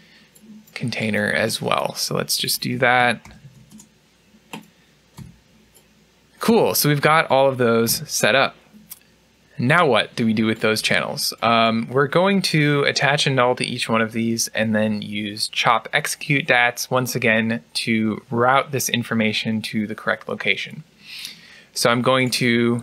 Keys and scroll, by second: 3.6 typing, 7.7 u.